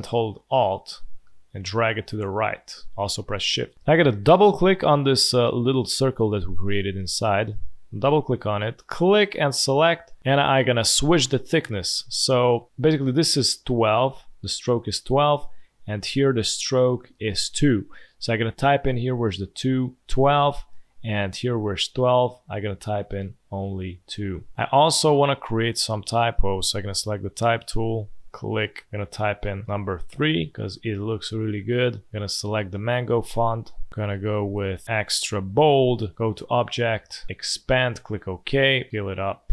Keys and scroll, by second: 20.0 1, 20.0 2, 24.3 2, 25.9 space, 29.6 3.